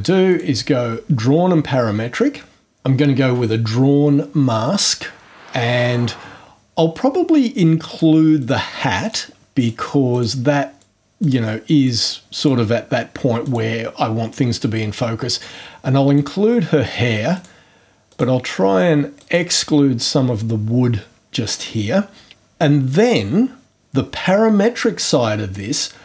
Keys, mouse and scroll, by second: 0.3 click, 7.9 click, 8.4 click, 9.0 click, 9.5 click, 10.1 click, 10.9 click, 11.2 click, 11.8 click, 12.4 click, 13.4 click, 14.5 click, 16.1 click, 17.3 click, 18.1 click, 19.2 click.